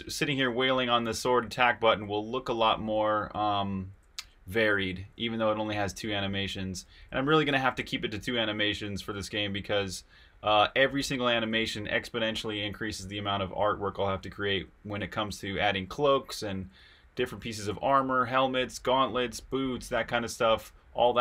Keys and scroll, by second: 0.0-11.7 typing, 13.2-21.0 typing.